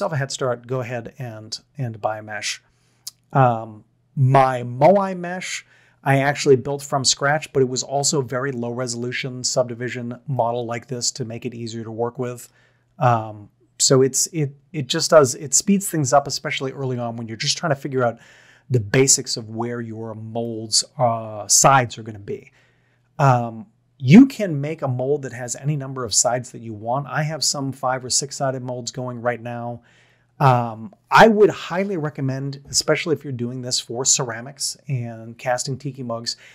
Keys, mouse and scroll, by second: 10.3-12.4 middle drag, 20.5-22.5 middle drag.